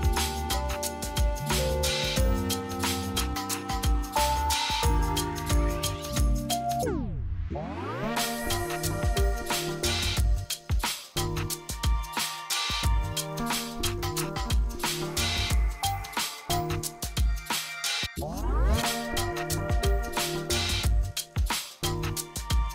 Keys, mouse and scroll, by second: 6.8 right click, 7.7 F3, 10.1-12.3 drag, 12.3 right click, 13.4 F4, 13.9 click, 14.9 F2, 15.2-18.3 drag, 18.3 F4, 19.6-22.7 drag.